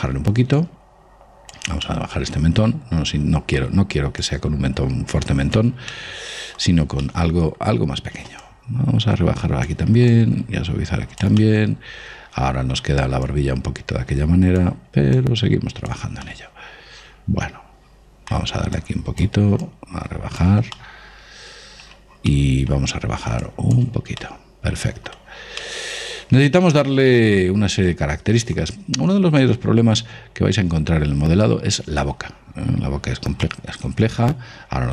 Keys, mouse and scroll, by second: 0.9 click, 2.6-4.5 middle drag, 4.5 click, 6.3-9.2 middle drag, 8.7-12.4 drag, 11.7-13.6 middle drag, 13.6-17.4 drag, 16.6-18.4 middle drag, 19.1-21.8 drag, 21.1-27.8 middle drag, 23.8 click, 29.7-33.8 scroll up 1, 33.8-34.9 middle drag.